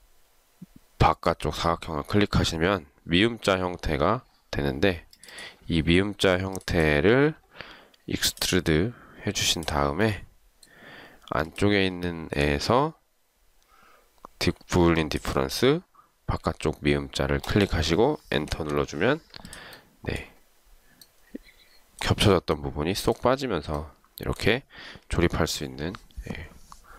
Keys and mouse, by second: 1.2 shift+click, 12.2 shift+right click, 18.6 Return.